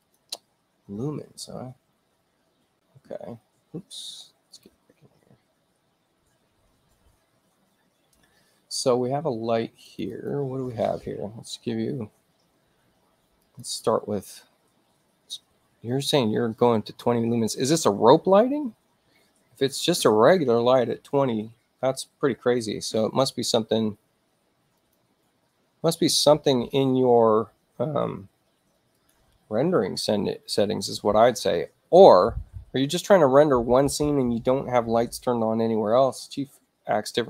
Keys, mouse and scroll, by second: 0.0 click, 4.5 click, 9.8 click, 10.1 click, 13.4 click, 24.8 click, 28.9 click.